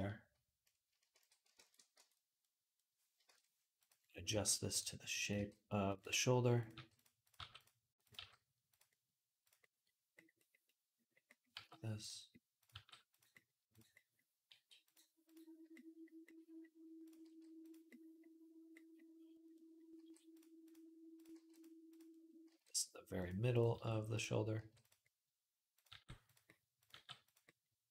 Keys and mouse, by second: 0.9 shift+d, 1.0-3.6 ctrl+middle drag, 1.4 ctrl+a, 1.8 Tab, 3.1 shift+Tab, 3.6 click, 3.7-5.0 middle drag, 4.1 g, 5.0 click, 5.1-6.4 middle drag, 5.1 g, 6.4 click, 6.5 middle click, 6.5 g, 7.0 click, 7.2 middle click, 7.2 g, 7.8 click, 7.9-9.2 middle drag, 8.0 g, 9.2 click, 9.3-15.1 middle drag, 11.4 g, 12.4 click, 12.5 g, 14.3 g, 15.1 click, 15.5-16.8 middle drag, 16.8 click, 17.0-20.9 middle drag, 17.0 g, 19.8 g, 20.9 click, 21.0 middle click, 21.1 g, 21.7 click, 21.8-23.3 middle drag, 22.3 g, 23.3 click, 23.5-27.9 middle drag, 23.5 g, 24.4 g, 25.5 click, 25.7 g, 26.7 g, 27.7 click.